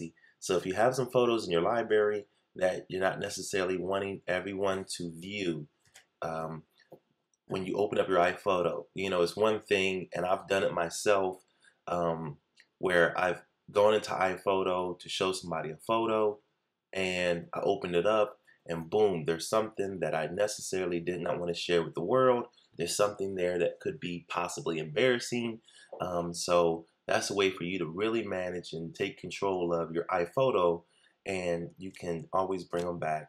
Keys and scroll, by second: 5.8 shift+super+h, 32.7 shift+super+h.